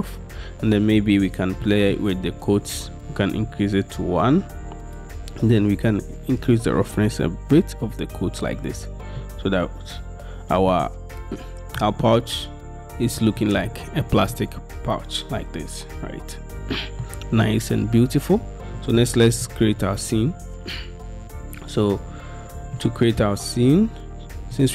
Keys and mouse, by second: 11.9-13.5 middle drag, 14.5-18.9 middle drag, 22.9-24.7 middle drag.